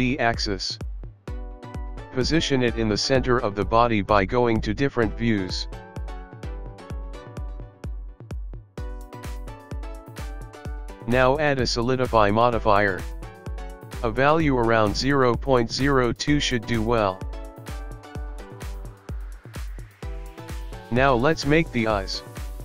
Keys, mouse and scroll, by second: 0.9 middle click, 1.4 KP_3, 3.4 Tab, 5.1 g, 10.4 click, 13.4 click, 15.9 click, 15.9 middle click, 18.3 KP_1, 19.3 KP_3, 19.5 click, 19.9 g, 21.2 click, 21.3 middle click, 21.4 click, 21.5 middle click, 21.5 scroll down 1, 22.0 KP_3.